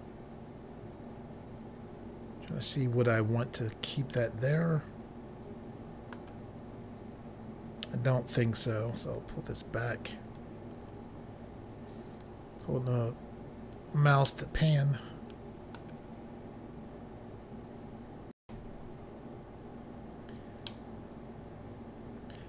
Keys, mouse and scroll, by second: 7.9-8.5 scroll down 3, 9.3 click, 10.8 scroll up 4, 12.3 click, 14.3 middle click, 19.7 Pause, 20.6 middle click.